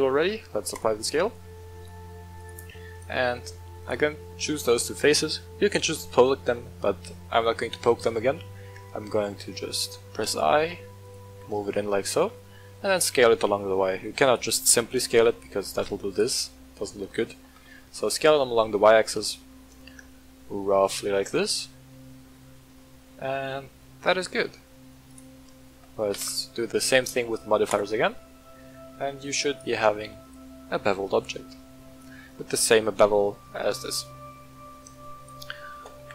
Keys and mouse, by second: 0.1 ctrl+a, 1.3 Tab, 2.3 click, 2.9 right click, 3.3 middle drag, 3.8 shift+click, 4.3-5.5 middle drag, 7.3 i, 11.0 click, 11.4-11.8 middle drag, 12.1 s, 12.3 y, 14.2 click, 14.6 s, 16.1 right click, 16.8-17.2 middle drag, 17.4 s, 17.6 y, 20.8 click, 21.2-21.6 middle drag, 21.9-22.2 middle drag, 22.3 Tab, 22.7-24.0 middle drag, 25.0 shift+click, 26.1 ctrl+l, 28.5-29.2 middle drag, 29.5 right click, 29.9 w, 30.6-31.9 middle drag, 33.5-34.8 middle drag, 35.1 shift+click, 35.9 g.